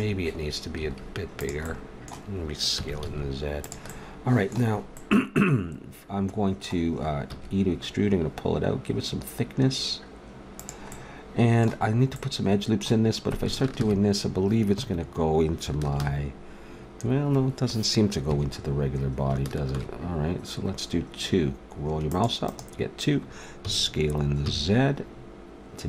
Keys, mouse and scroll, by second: 0.0-1.6 middle drag, 0.8 s, 2.8 s, 7.2 e, 11.0 middle click, 12.4 middle click, 13.8 ctrl+e, 15.9 ctrl+r, 19.7 ctrl+r, 23.6 s.